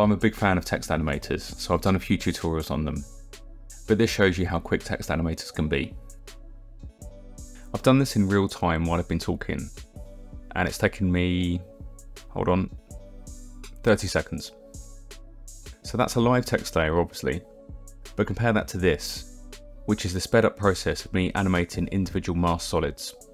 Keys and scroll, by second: 15.5 KP_0, 19.4 u, 20.7 KP_0, 21.3 space, 22.8 s, 23.0 alt+Left.